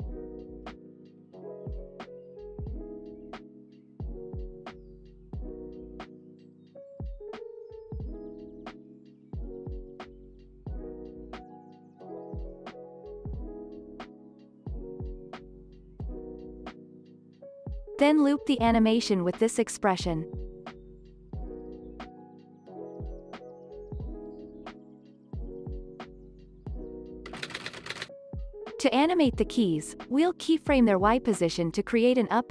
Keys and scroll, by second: 0.7 ctrl+c, 2.0 ctrl+v, 3.4 space, 5.0 ctrl+s, 15.2 Delete, 19.4 ctrl+v, 19.8 Return, 22.4 space, 27.1 ctrl+s, 28.7 space, 29.6 p.